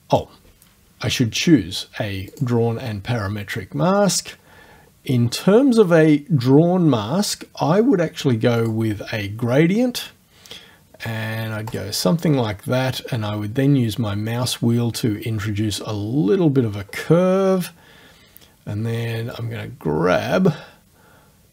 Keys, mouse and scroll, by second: 2.4 click, 4.2-4.9 scroll down 1, 5.1 scroll down 2, 8.6 click, 11.7 click, 13.4 scroll down 2, 19.4-21.5 drag.